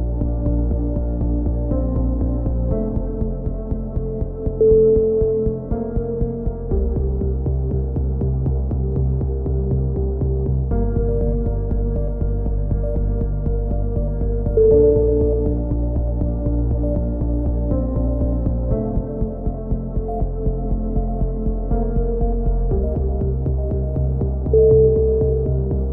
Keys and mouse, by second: 1.0 click, 2.0 click, 3.3 click, 3.8 click, 4.7 KP_7, 5.2 click, 6.4 click, 6.6 click, 7.7 KP_3, 8.3 click, 8.6 a, 8.9 click, 11.1 KP_7, 11.9-16.2 right drag, 18.7 click, 19.3 right click, 20.2 click, 21.1 click, 21.1 right click, 21.7 right click, 21.8 click, 22.2 ctrl+z, 22.8 click, 23.6 click, 24.3 KP_3, 24.7-25.7 drag.